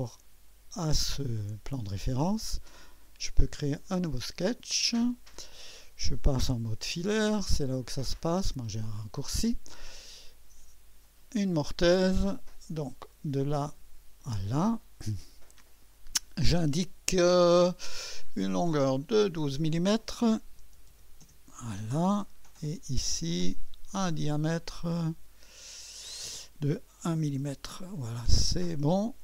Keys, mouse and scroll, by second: 3.8 click, 4.4 click, 11.0 click, 13.1 click, 14.2 click, 16.0 click, 18.7 click, 20.6 shift+9, 20.9 shift+0, 21.2 Return, 23.2 click, 24.8 click, 25.9-27.1 drag, 27.1 typing, 28.6 click.